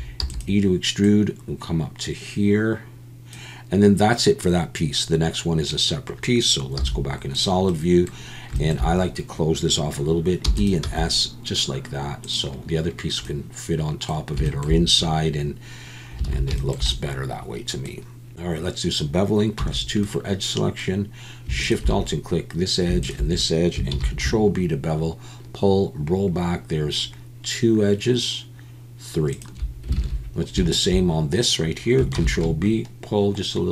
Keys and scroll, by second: 0.2 e, 6.8 z, 10.4 e, 10.8 s, 16.3 alt+a, 19.6 2, 23.9 ctrl+b, 29.9 alt+a, 32.1 ctrl+b.